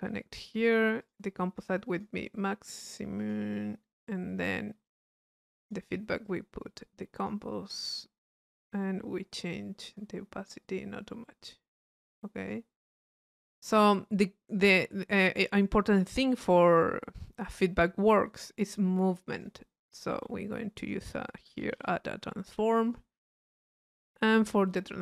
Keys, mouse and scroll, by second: 0.2-1.5 drag, 2.0 click, 3.2 click, 5.7-7.5 drag, 8.6 click, 9.9 click, 10.6-12.7 drag, 12.9 middle click, 13.3 click, 14.8 click, 15.7 right click, 16.8-18.4 drag, 18.7 click, 19.0 click, 20.1 right click, 20.8 click, 22.9 click, 23.9 click.